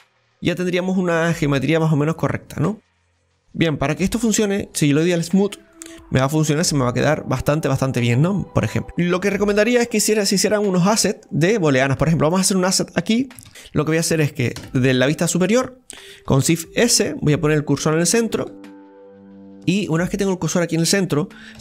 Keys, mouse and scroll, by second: 0.1 scroll down 2, 0.4-8.8 middle drag, 8.8 shift+middle click, 9.5 KP_7, 10.5-12.3 shift+middle drag, 12.3-13.5 drag, 13.5 right click, 14.6 KP_7, 16.4 shift+s, 18.4 shift+middle click, 19.0-19.5 scroll up 1, 19.5 shift+middle click, 20.1-21.6 scroll down 1.